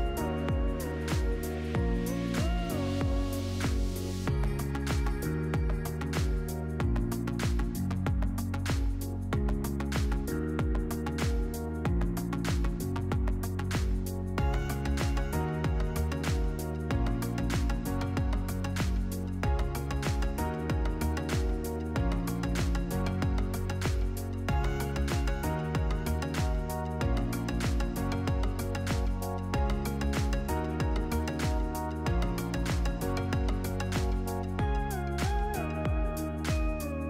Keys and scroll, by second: 14.4 ctrl+v, 17.5 1, 18.8 Return, 28.0 ctrl+z, 30.9 ctrl+shift+z, 36.8-37.0 typing.